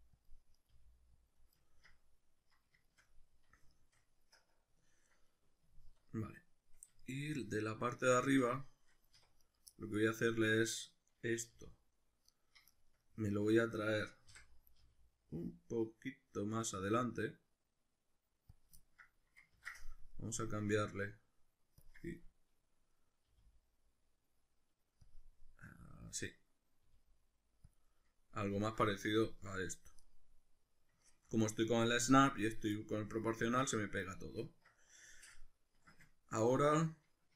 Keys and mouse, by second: 0.2 click, 0.5 right click, 0.7 g, 1.3 click, 1.6-9.4 ctrl+middle drag, 9.2 1, 9.4 right click, 9.7-12.4 middle drag, 11.5 g, 12.4 right click, 12.7-14.8 shift+middle drag, 14.3 o, 14.8 g, 18.6 click, 18.8 ctrl+middle click, 19.5 ctrl+z, 20.1 click, 20.5-22.9 drag, 22.9 middle click, 23.3 g, 25.1 click, 25.3 middle click, 26.1 middle click, 26.9 g, 27.7 click, 27.9-36.7 middle drag, 36.7 a.